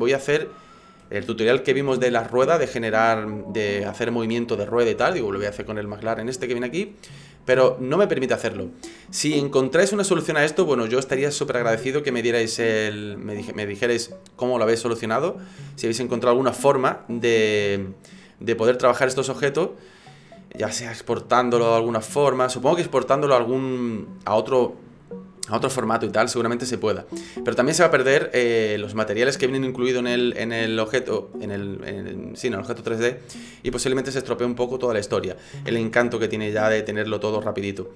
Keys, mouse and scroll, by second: 16.7 right click, 17.3 right click, 20.1 click, 37.4 click.